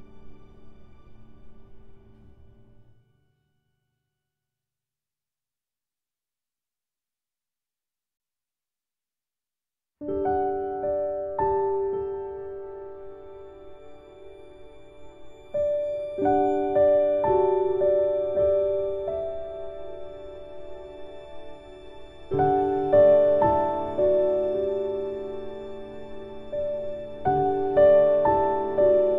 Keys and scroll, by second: 17.7 ctrl+z.